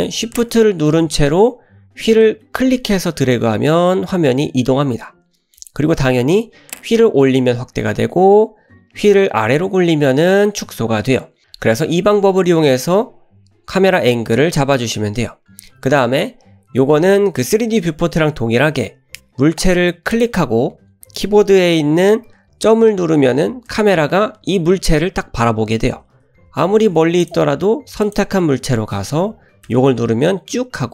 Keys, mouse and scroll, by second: 2.7-5.6 shift+middle drag, 7.2-7.5 scroll up 2, 9.8 scroll down 1, 10.2-11.4 scroll down 5, 20.1 click, 23.8 KP_Decimal, 25.6-26.5 scroll down 5, 26.6-26.9 shift+middle drag, 27.2 drag, 28.1 click, 29.7 KP_Decimal.